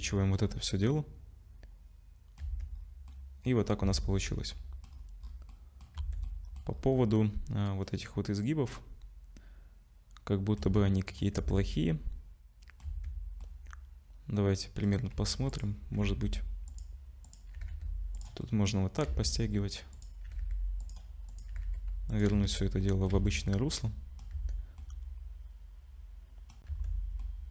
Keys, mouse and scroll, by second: 0.4-1.2 scroll down 4, 0.9 middle click, 2.4 Tab, 2.8 scroll up 2, 3.1 middle click, 3.6-4.9 scroll down 7, 3.8 Tab, 4.5 middle click, 4.9-6.0 scroll up 6, 5.5 middle click, 6.0 Tab, 6.3 middle click, 6.7-7.0 scroll up 3, 6.9 middle click, 8.1 middle click, 11.4 Tab, 11.4 middle click, 11.6 middle click, 12.9 Tab, 13.4 middle click, 15.1 1, 15.5 click, 16.0 g, 17.3 click, 17.6 g, 18.4 middle click, 19.1 z, 19.9 click, 20.3 g, 21.3 click, 21.5 g, 22.3 z, 22.8 middle click, 23.1 Tab, 23.5 middle click, 24.3 Tab, 24.8 middle click, 26.7 Tab, 26.7-27.2 scroll down 4, 27.2 middle click.